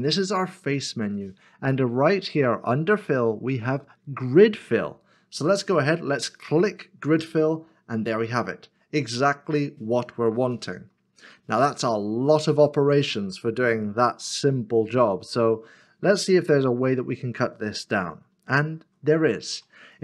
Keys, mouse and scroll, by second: 8.2 middle click, 14.5 middle click, 18.2 middle click, 18.7 ctrl+z.